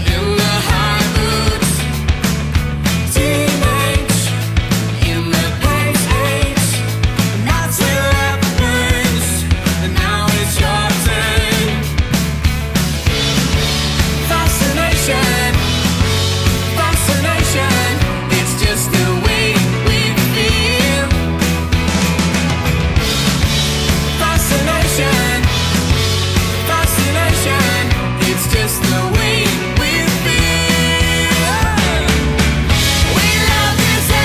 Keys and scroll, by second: 9.4 alt+shift+super+e, 12.5 Tab, 13.8 super+z, 22.8 super+z, 24.7 F5, 25.0 F7, 26.3 Tab, 30.9 alt+shift+super+e, 32.4 super+z.